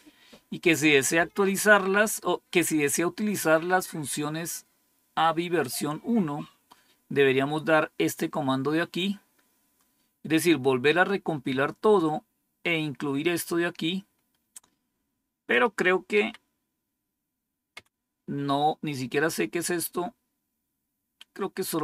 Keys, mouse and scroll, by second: 9.5-14.0 scroll up 1, 14.0-15.5 scroll up 1, 15.5 click, 16.2 Up, 17.7 Down, 21.7-21.8 drag.